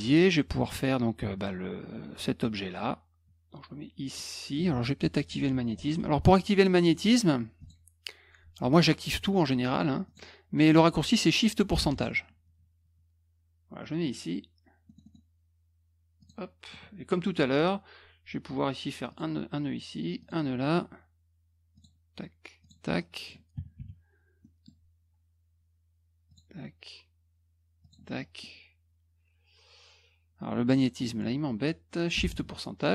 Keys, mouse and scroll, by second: 7.6 click, 10.0 click, 11.8 shift+ù, 14.8 middle click, 15.0 middle click, 16.2 click, 16.7 middle click, 19.0 click, 20.2 click, 21.7 click, 22.6 click, 22.9 middle click, 24.4 middle click, 26.3 click, 27.8 click, 28.1 middle click, 32.2 shift+ù.